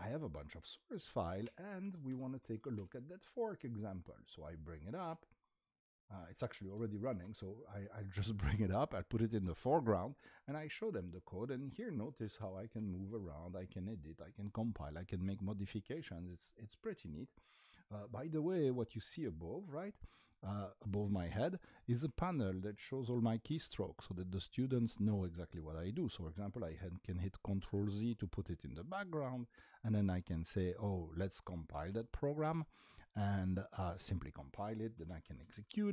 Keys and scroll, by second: 0.8-3.1 typing, 4.9 shift+a, 6.4-7.4 typing, 12.1 Up, 12.1-13.0 typing, 13.2 Down, 30.2 typing, 32.5 Tab, 32.5 Return, 34.7-35.9 typing.